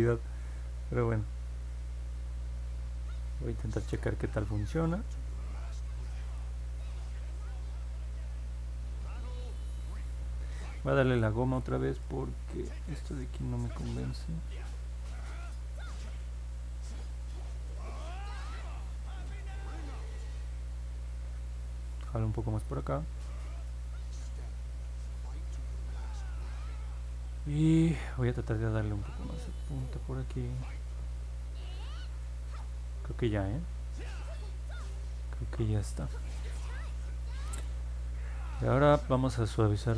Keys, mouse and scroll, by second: 16.8 click, 17.5 click, 18.1 click, 18.7 click, 19.3 click, 19.6 click, 19.9 click, 22.1 click, 22.6 click, 23.0 click, 23.3 click, 28.7 click, 29.2 click, 29.8 click, 30.5 click.